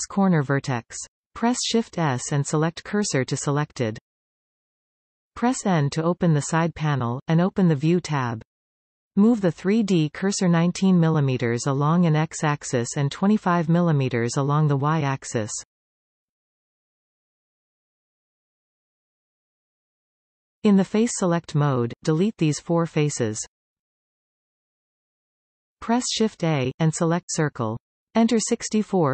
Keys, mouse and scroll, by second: 0.8 shift+s, 2.3-6.1 middle drag, 7.5 n, 9.0 click, 9.6 shift+s, 10.2-13.2 drag, 17.1-20.0 drag, 20.2 click, 20.8 click, 21.3 shift+click, 21.7 middle click, 22.4 shift+click, 22.7 shift+click, 23.1 middle click, 23.7 x, 28.1 shift+a.